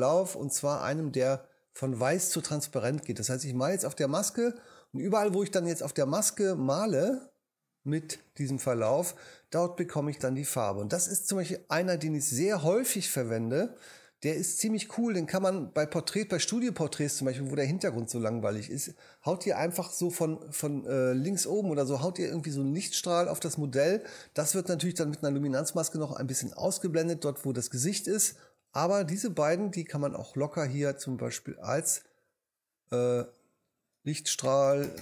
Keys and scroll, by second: 34.2-35.0 typing.